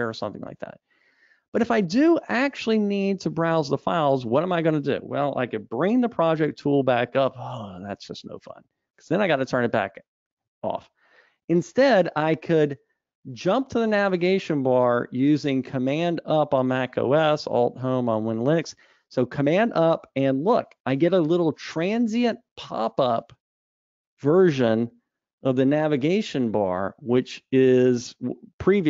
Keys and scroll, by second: 7.4 super+1, 20.6 super+Up.